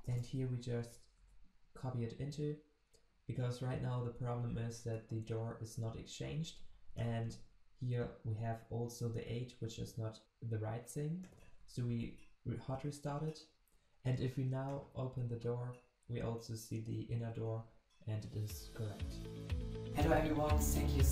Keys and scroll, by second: 1.2 ctrl+v, 12.1 ctrl+shift+\.